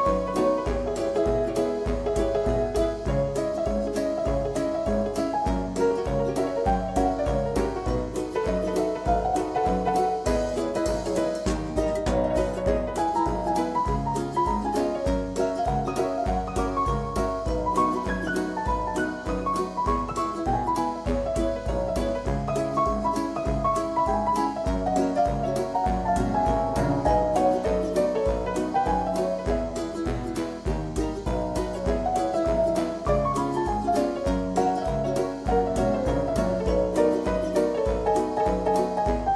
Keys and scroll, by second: 17.7-18.8 typing.